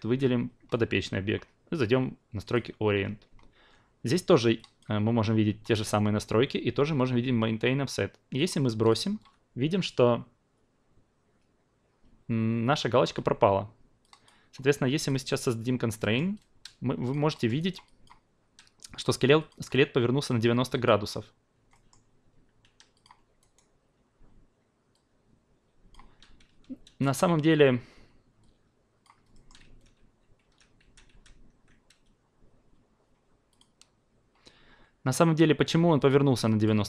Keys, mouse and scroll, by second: 2.4 click, 4.6-14.2 drag, 14.9 click, 16.0 alt+middle click, 16.3 alt+click, 17.6 alt+right click, 17.8 alt+click, 19.4 click, 20.7 drag, 21.7 alt+middle click, 22.9-23.4 drag, 23.4 alt+right click, 24.9-26.5 alt+drag, 26.9 ctrl+a, 28.4 click, 29.3 alt+middle click, 29.6 ctrl+z, 30.0 ctrl+z, 30.4 ctrl+z, 30.8 ctrl+z, 31.1 ctrl+z, 33.5 click, 36.0 click, 36.4 alt+click.